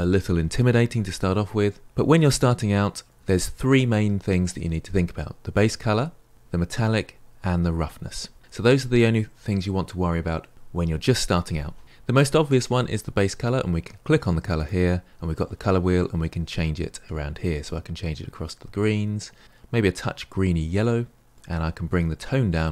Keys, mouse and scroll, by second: 16.6 click.